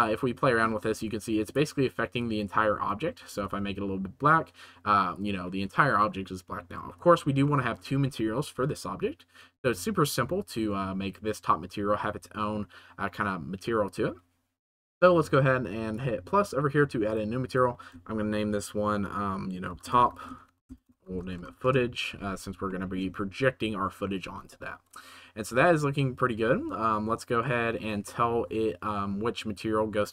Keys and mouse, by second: 1.4 right click, 3.2 g, 3.3 z, 7.5 shift+middle click, 10.5 shift+middle drag, 17.0 right click, 17.4 right click, 17.9-19.8 shift+middle drag, 19.8 right click, 20.3 shift+middle click, 20.6-21.6 right drag, 20.9 o, 22.6 middle click, 24.7 ctrl+s, 27.4 middle click.